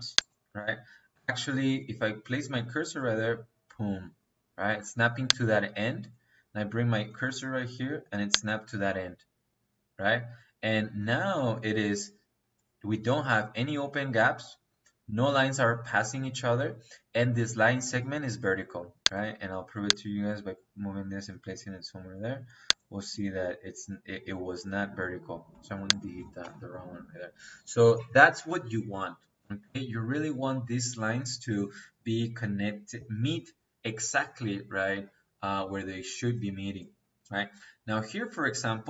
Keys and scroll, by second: 26.3 Delete.